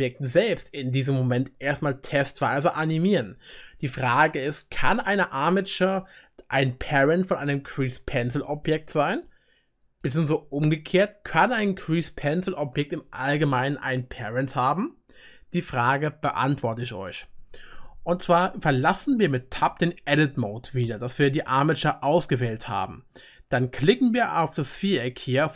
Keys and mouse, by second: 19.7 Tab.